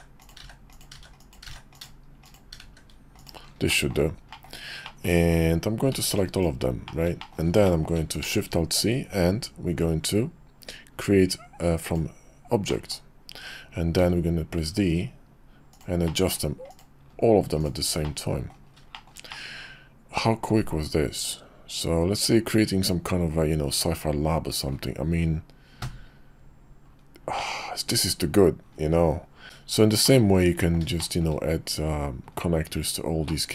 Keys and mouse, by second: 0.0-2.6 typing, 3.7 drag, 4.3 middle click, 4.8 click, 5.9 b, 6.8 middle click, 7.2 shift+middle drag, 7.6 middle click, 8.2 alt+shift+c, 12.7-16.8 middle drag, 17.6 click, 18.0 middle click, 18.9 shift+middle click, 19.3-24.7 middle drag, 27.4-28.0 middle drag, 29.0 KP_5, 29.4 shift+a, 30.0-30.5 drag, 30.5 middle click, 31.0 shift+middle click, 33.3-33.5 middle drag.